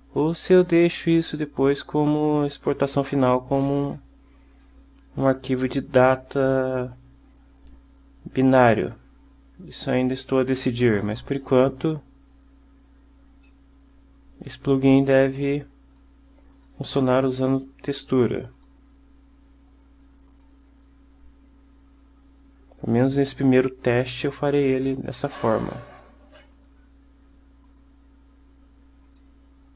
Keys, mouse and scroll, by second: 1.4-2.9 drag, 15.3-16.3 drag, 16.7 click, 17.3 right click, 18.7 click, 20.4 click, 25.7 click, 26.6 click, 27.8 click, 29.2 click.